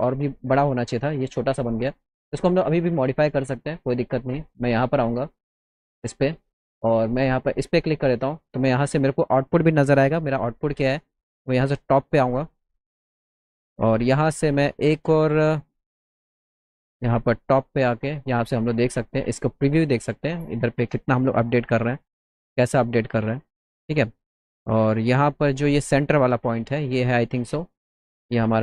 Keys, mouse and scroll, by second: 2.3 click, 3.2 click, 4.6 click, 5.2 click, 7.3 click, 10.4 z, 11.1 middle click, 11.1 scroll up 2, 11.4 middle click, 11.7 middle click, 13.1 middle click, 17.4 middle click, 18.5 middle click, 19.3 middle click, 20.5 middle click, 21.9 middle click, 23.5 middle click, 23.8 middle click, 24.2 middle click, 24.6-25.0 middle drag, 25.2 middle click, 27.2 middle click, 27.5 middle click, 28.1 middle click.